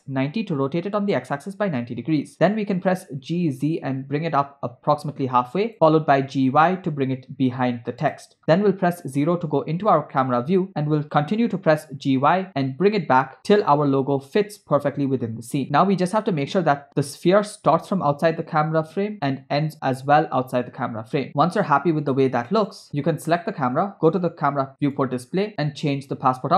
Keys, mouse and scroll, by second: 2.4 g, 6.1 g, 9.0 KP_0, 10.7 g, 15.6 click, 19.5 space, 22.7 click, 24.9 click, 25.3 scroll down 1, 25.9-26.5 drag.